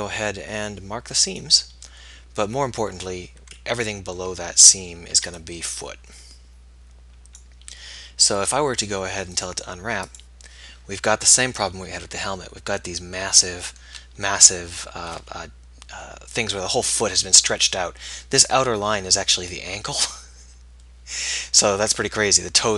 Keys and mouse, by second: 1.3-3.2 drag, 3.2-4.6 middle drag, 4.6 z, 5.4 b.